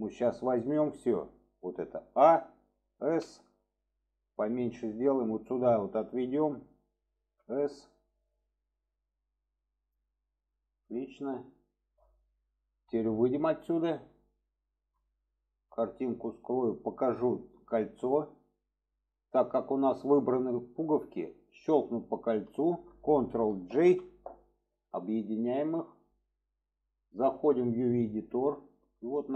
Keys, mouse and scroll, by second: 13.3 click, 14.3-14.8 shift+middle drag, 15.9 click, 18.8 click, 19.3-19.8 shift+middle drag, 20.2 middle click, 22.4 shift+click, 25.0-25.8 middle drag.